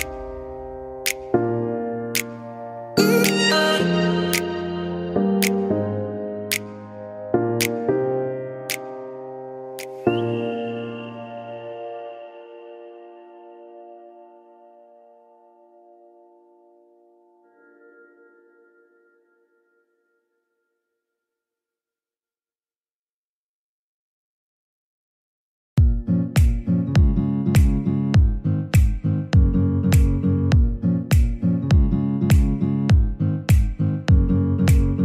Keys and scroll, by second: 4.0-4.8 typing, 12.5-13.3 typing, 32.9 typing.